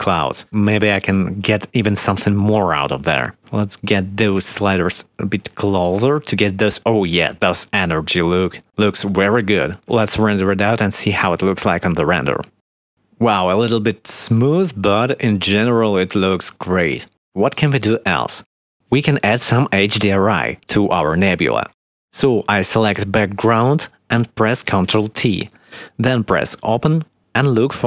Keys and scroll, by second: 9.8 ctrl+s, 11.5 F12, 24.9 ctrl+t.